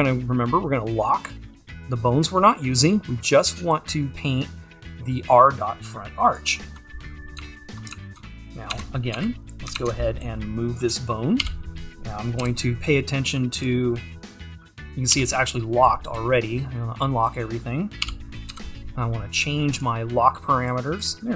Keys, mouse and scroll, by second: 7.1-7.4 scroll up 2, 7.4 `, 8.8 Tab, 9.7 click, 9.9 ctrl+Tab, 11.5 g, 13.6 g, 17.0-18.1 drag, 18.1 g, 20.7-21.3 drag.